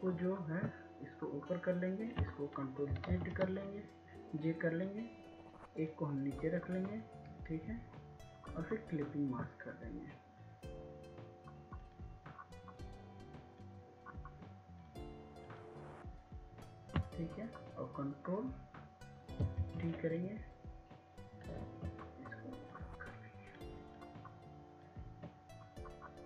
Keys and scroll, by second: 3.3 ctrl+j, 20.0 ctrl+t.